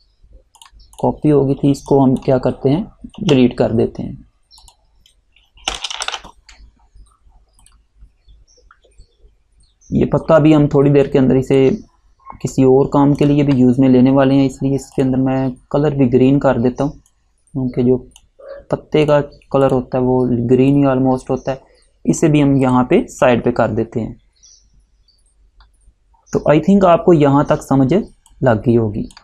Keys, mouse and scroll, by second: 0.7 click, 3.3 Delete, 4.7 click, 5.6 Delete, 9.1-9.5 alt+scroll down 1, 9.8 alt+scroll down 1, 10.7 space, 11.2 click, 11.3 space, 11.4 click, 11.6 space, 13.3 click, 27.0 scroll up 1, 28.2 space, 28.4 click, 28.7 space.